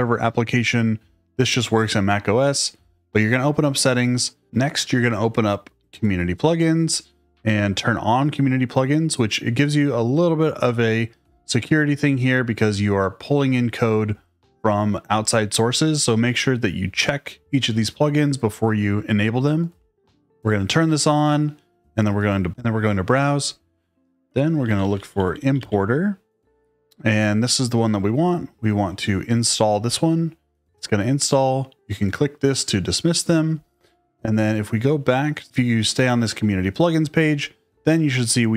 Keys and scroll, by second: 24.3-26.1 typing.